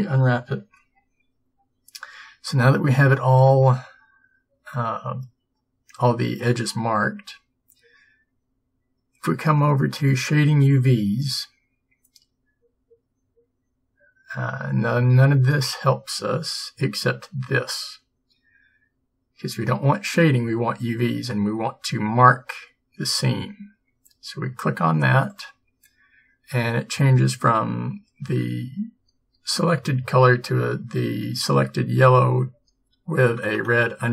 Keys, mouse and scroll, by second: 3.7-7.5 middle drag, 10.1-12.0 drag, 25.4-27.2 drag, 27.2 middle click.